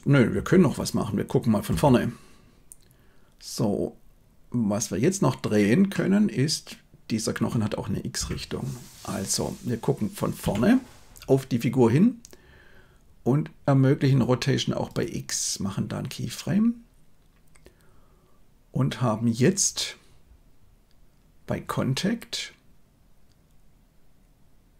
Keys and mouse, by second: 0.3 KP_1, 1.6 KP_3, 5.9-7.4 middle drag, 8.1 KP_1, 10.4 KP_3, 14.0 middle click.